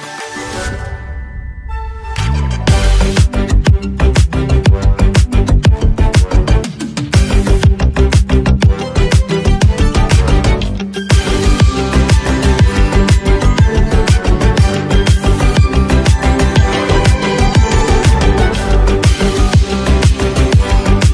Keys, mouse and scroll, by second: 20.1 ctrl+s.